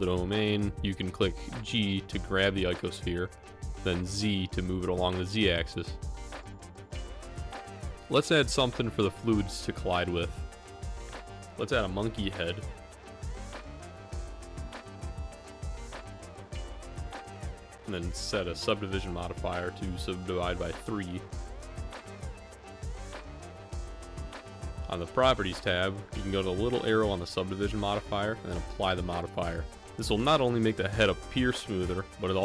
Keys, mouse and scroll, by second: 2.8-4.8 drag, 9.6 shift+a, 13.5 middle click, 14.2 KP_Decimal, 15.0 middle click, 15.5 g, 20.2-22.1 drag, 24.8 click, 26.3-27.7 middle drag, 29.3-31.9 drag.